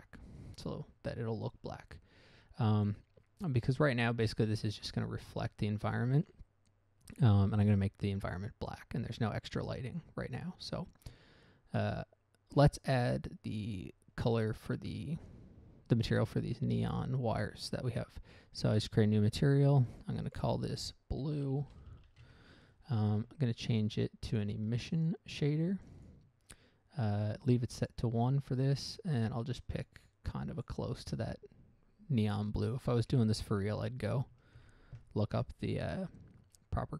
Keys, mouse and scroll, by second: 0.0 click, 2.4-3.0 scroll up 2, 17.7 click, 19.7 click, 20.3 click, 20.4 click, 20.6 click, 20.7 double click, 21.8-23.1 typing, 24.2 click, 26.3 click, 27.5 click, 28.1 click, 29.4 click, 30.2 click, 30.5 click, 31.0 click, 33.7 ctrl+c, 34.9 ctrl+v.